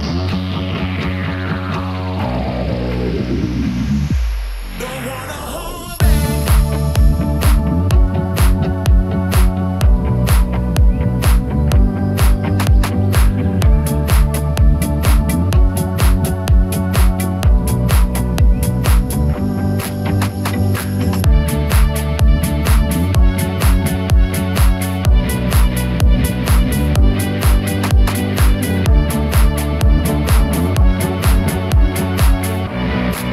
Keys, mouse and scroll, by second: 0.6 click, 1.2 /, 1.8 middle click, 2.6-3.0 scroll up 2, 4.1 ctrl+r, 6.6 right click, 7.2 Tab, 7.6-9.0 middle drag, 11.4 ctrl+z, 11.8 ctrl+z, 15.2-16.4 drag, 16.6 Tab, 18.0-19.2 drag, 19.6 Tab, 20.0 middle click, 21.2 e, 25.3 click, 26.1 Tab, 27.4 /, 28.0 Tab, 28.4-28.7 scroll up 2, 28.7 middle click, 30.3 ctrl+r, 30.9 right click, 31.6 Tab, 32.0-32.8 middle drag.